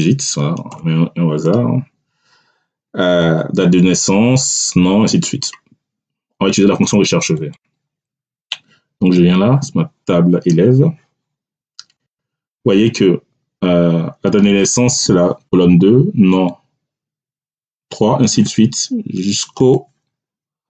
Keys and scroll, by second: 0.6 Return.